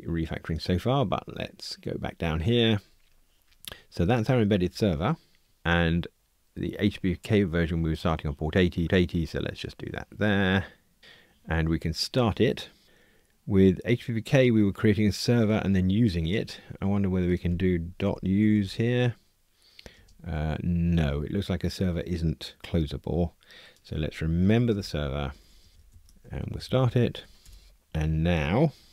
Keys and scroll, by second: 26.3 alt+shift+Left.